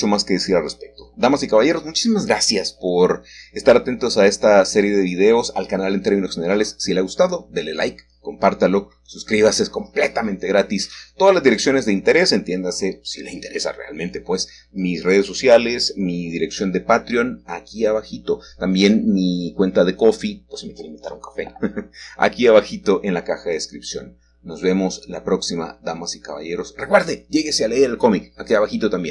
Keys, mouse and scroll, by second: 0.0-0.7 typing, 1.7-2.8 scroll down 1, 2.8-4.3 middle drag, 2.8-3.3 typing, 3.1 Tab, 6.4 middle click, 8.5 click, 12.2 click, 13.2-14.5 scroll up 1, 13.9-15.3 shift+middle drag, 15.3-16.9 scroll up 1, 18.4-23.2 drag, 24.6 click, 25.2 click, 28.1-29.1 scroll down 1.